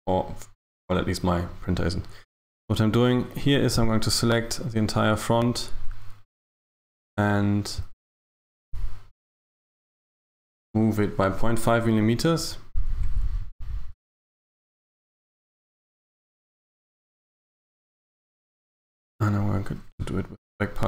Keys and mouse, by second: 2.6 right click, 3.5 right click, 7.1 shift+right click, 9.6 shift+right click, 12.5 g, 18.6 a, 18.8 a.